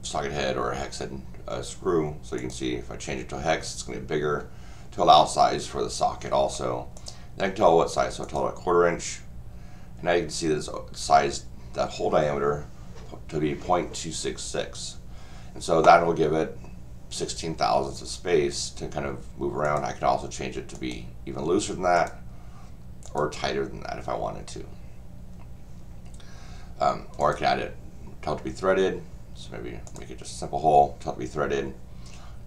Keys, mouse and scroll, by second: 2.4 click, 6.9 click, 8.2 click, 19.6 click, 20.7 click, 21.9 click, 23.0 click, 27.2 click, 29.9 click.